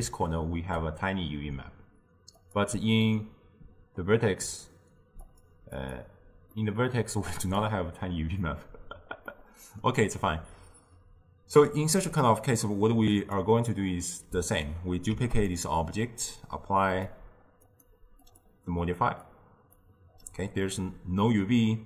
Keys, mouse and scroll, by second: 2.4 click, 3.1-5.3 middle drag, 5.3-6.6 drag, 6.6-7.4 middle drag, 7.4 click, 9.4-12.5 middle drag, 12.5-15.2 drag, 15.2 shift+d, 16.9-21.8 drag.